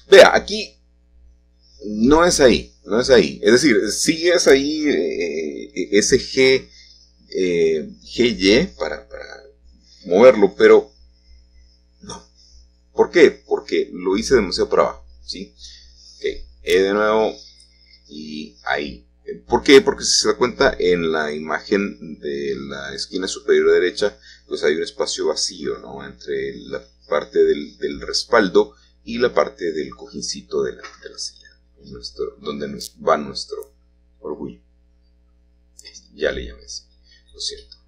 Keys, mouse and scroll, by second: 2.8-4.6 shift+middle drag, 4.6-5.5 scroll down 2, 5.5-7.3 middle drag, 6.0-6.5 scroll down 1, 10.5-11.4 scroll down 2, 11.7 ctrl+middle click, 11.9 ctrl+z, 13.3 ctrl+z, 14.6 g, 19.5-20.6 drag, 20.6 1, 22.8-23.8 shift+middle drag, 29.0-30.7 shift+drag, 30.7-32.3 shift+middle drag, 30.7-31.3 scroll down 1, 33.5-35.0 drag, 35.0-35.4 scroll down 1, 36.0 e.